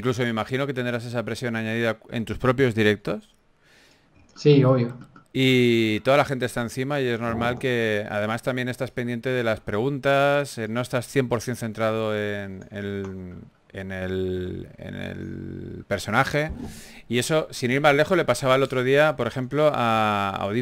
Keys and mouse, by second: 8.5 Tab, 9.1 a, 17.3 a, 18.1 Tab.